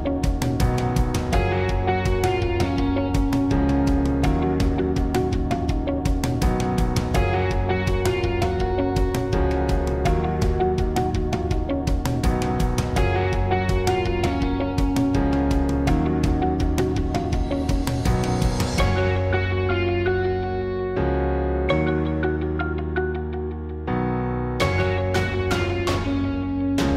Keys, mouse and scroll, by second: 0.4 Tab, 0.7 z, 1.4 z, 1.9 b, 2.1 z, 3.2-4.6 typing, 5.9 z, 6.0-7.4 drag, 6.0 s, 6.3 KP_1, 6.6 KP_3, 10.3 KP_1, 10.3 KP_3, 11.3 Tab, 12.8 shift+d, 14.2 shift+d, 14.4 KP_1, 15.7 KP_1, 16.0 Tab, 16.1 KP_1, 16.4 r, 18.6 KP_1, 19.5-22.0 drag, 19.6 r, 21.4 r, 22.0 s, 23.4-24.0 drag, 24.1 s, 24.8 click, 25.0 s, 25.0 click, 25.1 s, 25.4 click, 26.2 s.